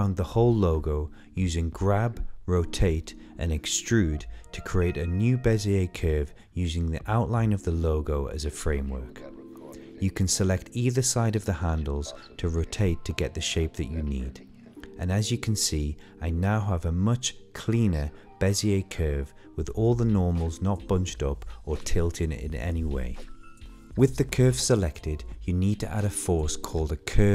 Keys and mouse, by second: 0.6 g, 1.4 click, 1.7 click, 2.3 g, 3.2 shift+middle click, 3.5 click, 4.4 s, 4.9 click, 5.2 click, 6.6 click, 6.8 click, 7.4 r, 8.6 0, 9.4 r, 10.2 r, 11.0 click, 11.3 click, 12.3 r, 12.6 click, 12.7 g, 12.9 shift+middle click, 13.6 shift+middle click, 13.6 shift+g, 15.3 click, 15.3-22.7 typing, 15.5 click, 15.9 click, 16.0 ctrl+shift+z, 16.0 shift+middle click, 16.4 click, 17.0 shift+middle click, 17.0 click, 17.2 click, 17.4 click, 17.8 middle click, 18.2 click, 20.2 click, 20.4 shift+middle click, 20.4 click, 20.7 click, 21.7 click, 22.6 click, 25.6 click, 26.1 click.